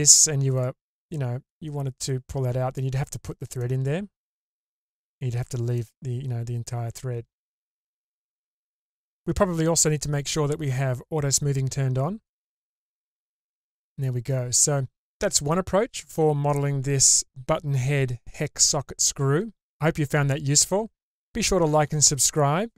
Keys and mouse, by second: 1.0-1.5 middle drag, 2.0 click, 3.6-5.0 middle drag, 5.8-7.3 middle drag, 8.2 ctrl+z, 8.8 middle click, 10.8 click, 12.6-14.0 middle drag, 15.8-17.2 drag, 18.3-19.2 middle drag, 20.5-21.7 middle drag, 22.6 middle drag.